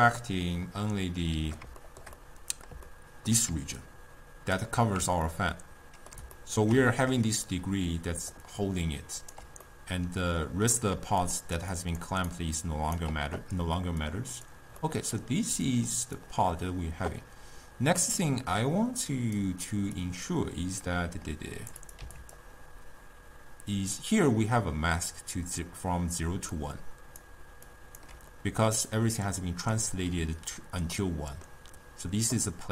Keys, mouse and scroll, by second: 1.9-3.6 shift+middle drag, 3.6 d, 3.8-4.4 drag, 4.4-4.9 d, 5.2 scroll down 2, 5.3-8.2 middle drag, 8.2 d, 8.4-9.4 right drag, 9.4 d, 9.7-11.0 middle drag, 11.0-13.2 typing, 11.3 click, 11.8 click, 12.4 right click, 14.3-14.8 drag, 14.8 middle click, 15.7 click, 18.2 middle click, 19.1-22.3 drag, 26.4 d, 26.6 click, 27.3-27.7 d, 27.8 click, 28.1 d, 28.3-30.3 middle drag, 30.3 d, 31.0-32.7 middle drag.